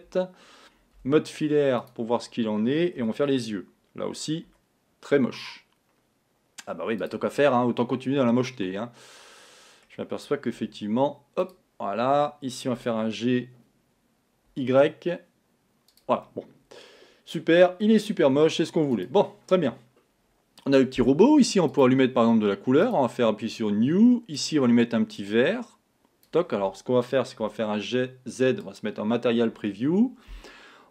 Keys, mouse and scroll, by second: 1.1 z, 3.2 g, 7.5-10.4 middle drag, 10.6 z, 13.0 g, 16.3-18.3 middle drag, 18.3 Tab, 19.0 click, 21.8 click, 22.9 click, 24.5 click, 27.5 z.